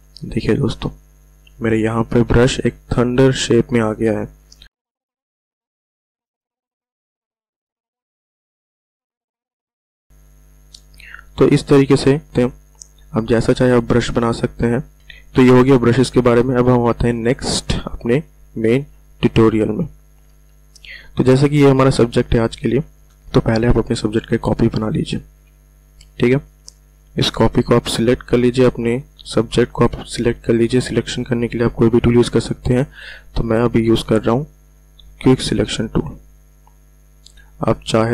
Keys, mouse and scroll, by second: 4.8 click, 6.4-7.5 typing, 8.0 click, 9.0 ], 9.7 [, 10.0 click, 17.5 click, 20.7 v, 24.5 ctrl+v, 25.3 ctrl+j, 31.6 w, 34.0-38.1 drag.